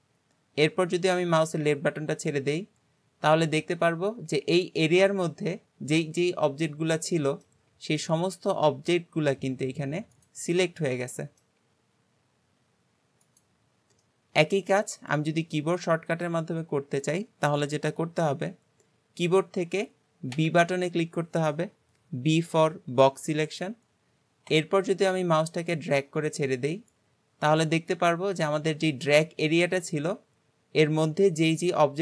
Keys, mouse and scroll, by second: 3.9-4.6 scroll down 1, 4.6-7.7 middle drag, 7.7 g, 10.5-11.6 middle drag, 11.6 g, 14.0-15.0 middle drag, 15.0 click, 15.4-15.8 scroll down 1, 15.8-16.6 shift+middle drag, 16.6-19.6 scroll down 1.